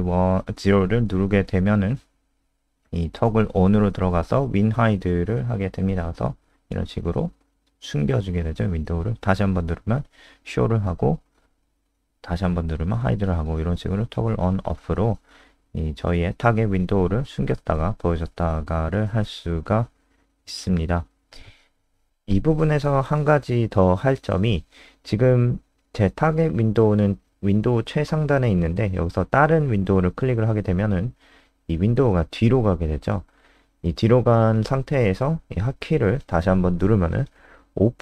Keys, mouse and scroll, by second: 6.7 click, 8.5 KP_0, 18.6 click, 19.3 ctrl+alt+space, 29.6 click, 36.2 KP_0.